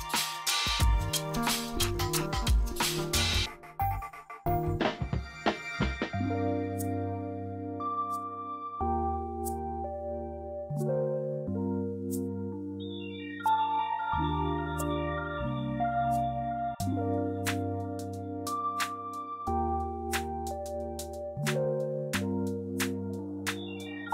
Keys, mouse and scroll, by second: 5.1 right click, 6.6 click, 7.1 right click, 8.0-11.1 drag, 11.4 F2, 11.7-14.3 drag.